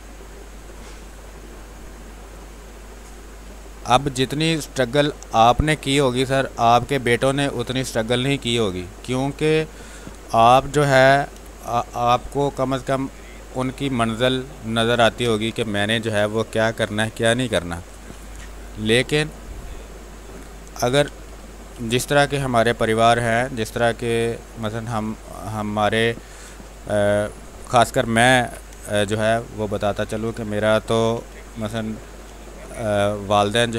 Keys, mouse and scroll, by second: 1.2-4.2 drag, 4.2 space, 4.5 click, 4.7 space, 5.5-8.1 drag, 8.1 space, 8.6 alt+click, 10.0 r, 10.1 click, 11.0 b, 11.3 ctrl+space, 11.6 ctrl+click, 11.9 click, 12.2 space, 12.8 click, 13.8 space, 14.0 alt+click, 19.8 space, 20.1 click, 20.6 ctrl+d, 21.2-24.0 typing, 22.0 click, 23.1 click, 23.7 click, 25.1 ctrl+click, 26.6 click, 27.0 click, 28.3 b, 28.7 space, 28.8 ctrl+click, 29.3 click, 30.4 click, 30.9 b, 31.2 space, 31.4-33.7 ctrl+drag.